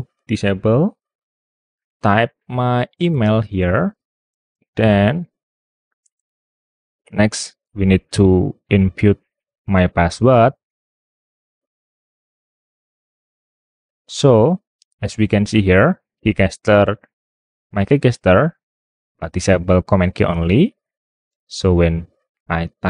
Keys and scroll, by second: 1.7-4.8 typing.